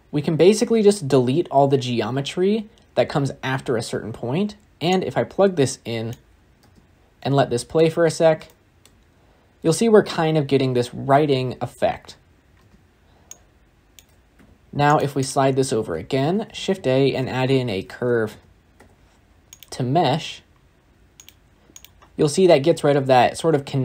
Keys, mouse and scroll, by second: 6.0 click, 6.5 space, 7.3-7.7 shift+middle drag, 7.7 scroll down 1, 7.9-8.3 scroll up 2, 8.3-8.8 shift+middle drag, 8.8-11.9 scroll up 2, 11.9-12.4 scroll down 11, 12.4 space.